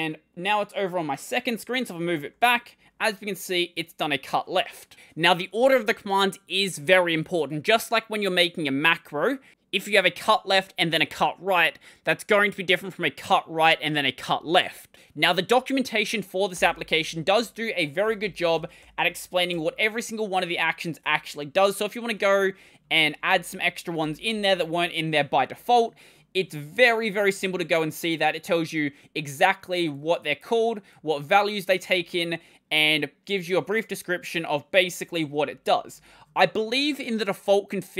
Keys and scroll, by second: 2.1 l, 16.4 super+Return, 17.6-19.6 typing, 21.6 ctrl+=, 21.8-24.4 typing.